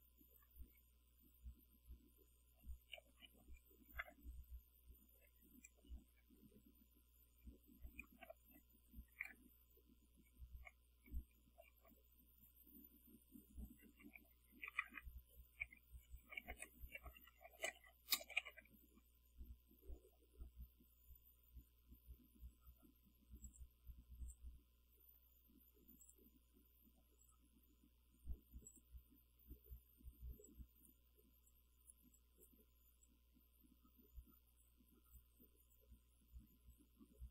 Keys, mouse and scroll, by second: 0.6 Right, 2.0 Right, 3.1 Delete, 3.2 1, 3.3 Right, 3.9 Delete, 4.1 0, 4.2 Left, 5.2 Left, 5.9 Delete, 6.2 5, 6.3 Left, 8.1 Delete, 8.3 0, 8.5 Right, 9.1 Delete, 9.3 5, 9.5 Right, 11.0 End, 11.6 Return, 13.9-19.0 typing, 23.5 click, 24.3 click, 26.1 click, 27.3 click, 28.7 click, 30.5-31.1 drag, 31.5-32.7 drag, 33.1-34.9 drag, 35.2-36.0 drag, 36.8-37.3 drag.